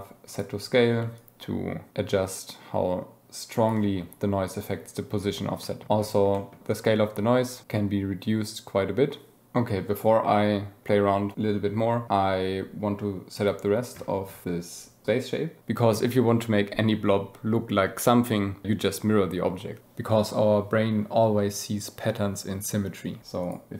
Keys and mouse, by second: 1.2-3.8 shift+drag, 5.6 click, 6.3 click, 7.6-9.5 drag, 9.5 right click, 14.4-23.5 drag.